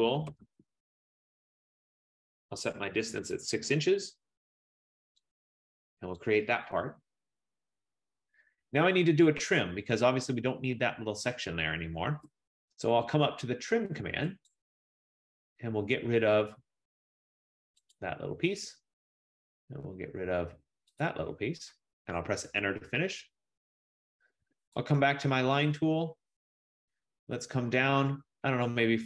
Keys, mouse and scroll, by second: 0.0-1.0 typing, 2.3-3.6 typing, 5.2-5.9 typing, 5.4 click, 6.3 click, 12.3 Return, 14.6 click, 18.0 click, 21.1 click, 22.5 Return, 25.1 click, 25.9-27.3 scroll.